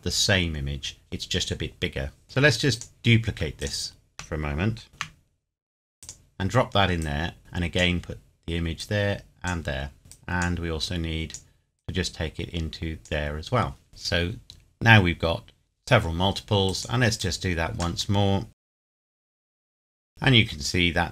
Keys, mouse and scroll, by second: 2.2 click, 3.6 shift+click, 4.9 shift+d, 6.0 click, 15.9-16.7 scroll down 1, 16.7 click, 18.7 shift+d, 19.0 click.